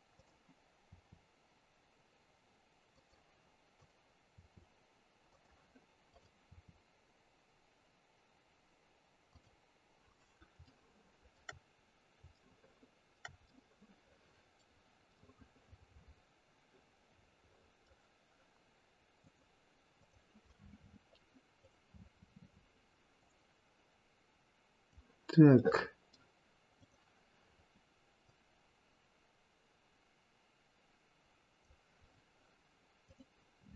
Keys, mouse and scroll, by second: 0.1 click, 0.9 r, 3.7 click, 6.1 click, 6.7 r, 11.3 shift+middle click, 11.7-12.5 scroll down 2, 12.5 shift+middle click, 13.7 middle click, 15.3 middle click, 16.5 middle click, 16.8 middle click, 17.5 middle click, 19.2 click, 19.9 click, 22.1-23.2 scroll down 6, 23.2 click, 23.2-23.6 scroll down 2, 25.5 middle click, 26.8 click, 28.2 click, 33.1 click.